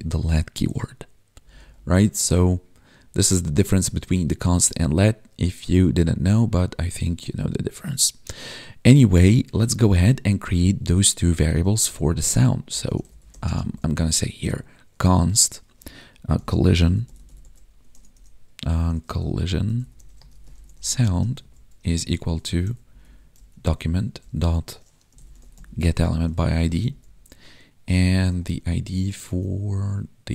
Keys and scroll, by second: 1.4 Up, 13.4 space, 21.0 space, 21.7 space, 23.8 Tab, 25.8 Tab, 28.5 ctrl+Tab.